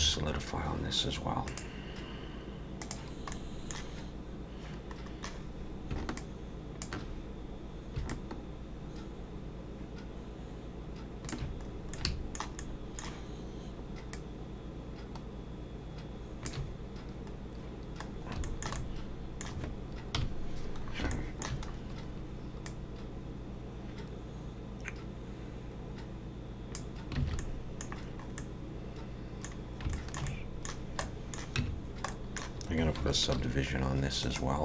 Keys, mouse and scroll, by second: 1.5 click, 3.3 middle click, 6.1 shift+click, 8.1 shift+click, 11.7 scroll up 3, 11.9 middle click, 12.6 shift+middle click, 14.1 shift+click, 17.4-18.3 scroll down 1, 18.4 shift+middle click, 18.8 middle click, 20.1 KP_1, 20.8 scroll up 2, 21.1 shift+middle click, 21.7 scroll up 2, 22.6 click, 27.2 alt+a, 27.4 middle click, 27.9 scroll down 4, 28.4 middle click, 29.6 scroll down 2, 29.9 shift+middle click, 30.3 middle click, 31.0 middle click, 31.6 Tab, 32.1 middle click, 33.4 ctrl+2, 34.2 right click.